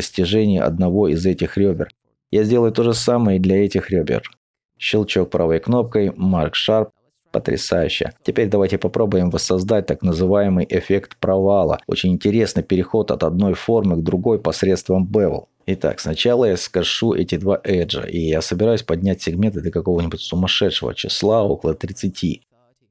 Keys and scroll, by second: 0.2 alt+shift+Tab, 6.7 alt+Tab, 6.7 2, 20.8 typing, 22.4-22.8 typing.